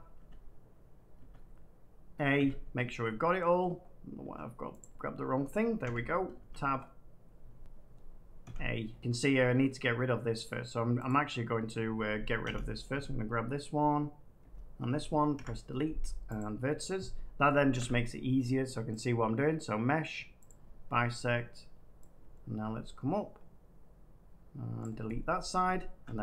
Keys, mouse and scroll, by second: 0.1 Tab, 1.1 Tab, 2.3 a, 3.1 middle click, 3.5-4.0 scroll down 3, 4.0 scroll, 4.1 Tab, 4.7 click, 5.8 1, 6.3 Tab, 6.7-7.1 scroll, 8.4 a, 10.4 click, 11.0 click, 15.3 Delete, 16.3 click, 17.7 a, 18.9 click, 20.4 click, 24.7 click, 26.0 a.